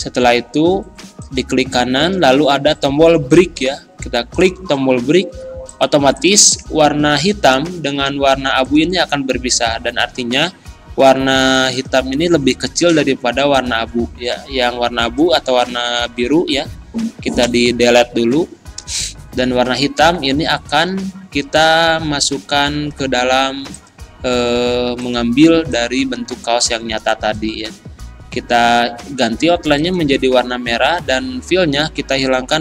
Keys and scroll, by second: 17.4 Delete, 20.7 z.